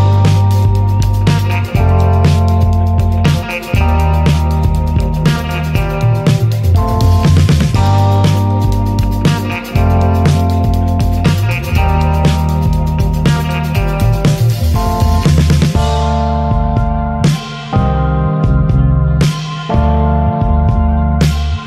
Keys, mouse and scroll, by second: 0.0 alt+z, 0.2 click, 0.9 click, 1.4 alt+z, 1.5 click, 1.8 alt+z, 2.2 click, 3.2 alt+z, 3.4 alt+z, 4.0 click, 6.4 click, 7.5 alt+z, 7.8 scroll down 1, 8.1 shift+middle drag, 8.3 alt+z, 8.6 alt+z, 9.3 alt+z, 9.7 drag, 10.9 click, 11.8-12.1 shift+middle drag, 12.1 ctrl+z, 12.5 drag, 13.3 click, 14.1 click, 15.0 shift+middle click, 15.4 click, 16.0 click, 16.8 click, 17.2 click, 18.4 scroll down 3, 18.7 alt+z, 19.0 alt+z, 19.2-19.6 scroll up 2, 19.4 shift+middle click, 19.9 click, 20.8 click, 21.4 click.